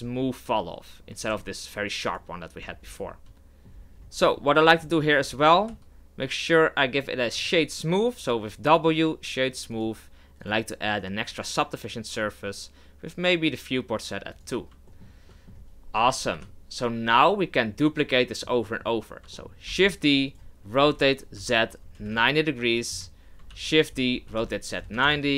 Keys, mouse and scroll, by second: 1.3 g, 2.6 Tab, 2.8 scroll down 5, 3.1-3.7 middle drag, 3.7-4.3 scroll down 6, 4.3-5.7 middle drag, 5.7 w, 9.7 click, 10.4-13.5 drag, 14.3 click, 14.9-16.3 shift+middle drag, 16.3 KP_7, 17.8-19.7 middle drag, 19.7 shift+d, 20.8 r, 23.5 shift+d, 24.1 r.